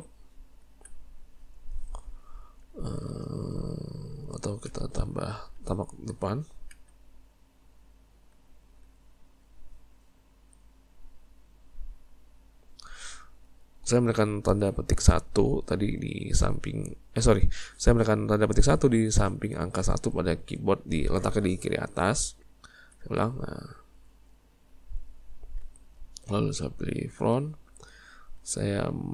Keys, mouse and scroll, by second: 2.7-4.7 shift+middle drag, 4.7 `, 6.7 `, 11.6-14.7 middle drag, 22.9 `.